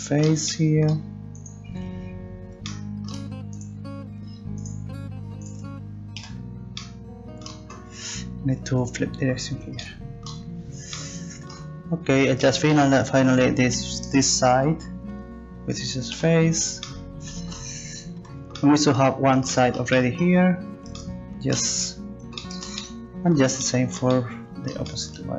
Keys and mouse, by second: 1.4 right click, 2.3 right click, 3.5-5.5 right drag, 6.2 f, 8.6-10.4 drag, 13.2-16.1 right drag, 16.1 e, 18.2 a, 24.4 right click.